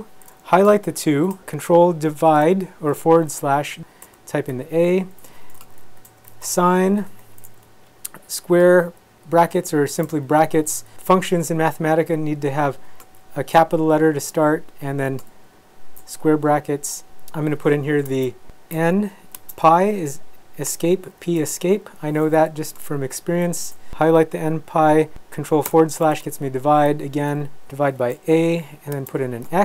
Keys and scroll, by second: 1.0 shift+Left, 2.4 ctrl+/, 4.0 a, 4.4 Right, 4.9 Right, 5.6-7.1 typing, 7.6 Left, 8.4 Left, 8.8 shift+Right, 9.0 shift+Right, 9.6 Left, 9.9 Right, 10.6 Right, 11.4 Left, 12.4 Left, 12.6 Left, 12.7 Left, 14.2 Right, 14.5 Right, 15.1 Left, 15.3 shift+Right, 15.4 shift+Right, 16.3 Right, 18.1 space, 18.7 n, 19.4 space, 20.7 Escape, 21.1 p, 21.4 Escape, 23.0 shift+Left, 23.4 shift+Left, 25.7 ctrl+/, 26.5 Down, 26.9 Up, 27.4 Right, 28.0 a, 28.4 Right, 28.9 space, 29.4 x.